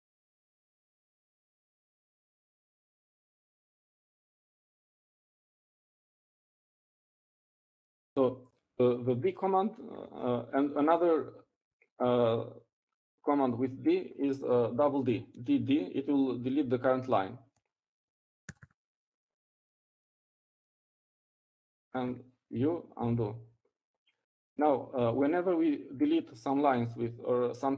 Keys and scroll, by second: 14.1 Up, 21.1-22.0 typing, 25.0 u.